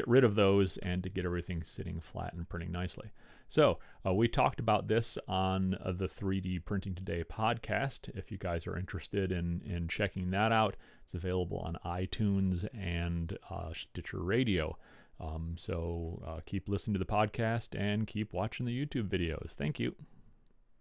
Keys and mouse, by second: 1.1-2.8 middle drag.